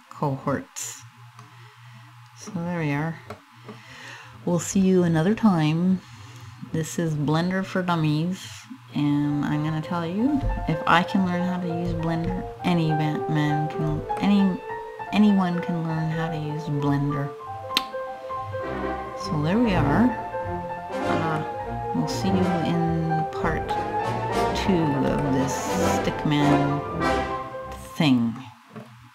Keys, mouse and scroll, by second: 2.3-3.0 scroll up 2, 3.0 middle click, 8.7-10.2 scroll up 1, 12.3 shift+middle click, 13.2 shift+middle click, 13.8 middle click, 15.1 scroll up 2, 15.7 scroll down 1, 16.4-16.7 scroll down 3, 18.4-18.8 scroll down 1, 18.8 scroll up 2, 19.3-19.9 scroll up 1, 19.9 scroll up 2, 21.0 middle click, 23.3 shift+middle click, 25.3-26.2 scroll down 5, 26.2 middle click, 27.8 middle click, 28.5-29.1 scroll up 7.